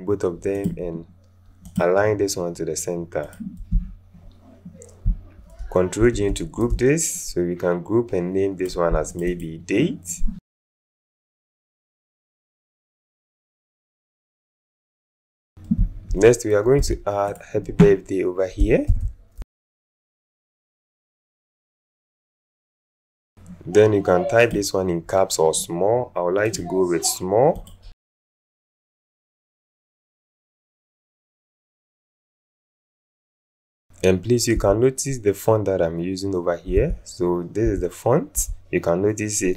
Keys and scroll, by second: 6.0 ctrl+alt+g, 11.5 alt+space, 16.7 t, 18.9-22.6 typing, 36.7 1.